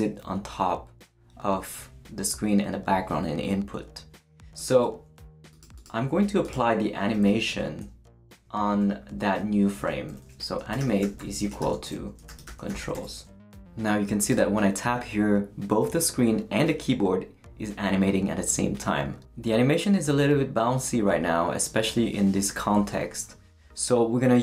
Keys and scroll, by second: 7.1 Left, 7.5 space, 10.4-13.4 typing.